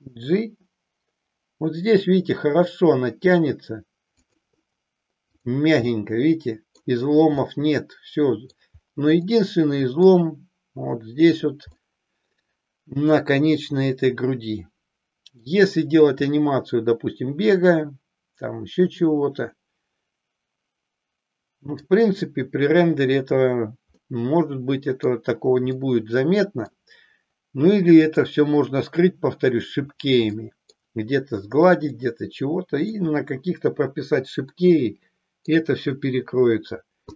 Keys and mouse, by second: 4.3 click, 5.3 click, 5.8-6.8 middle drag, 7.4-8.7 middle drag, 9.3 middle click, 11.8-15.5 middle drag, 16.3-21.8 middle drag, 24.0-25.0 middle drag, 25.8 middle click, 30.4 middle click, 31.9-33.0 middle drag, 34.5-35.7 middle drag, 37.0 click.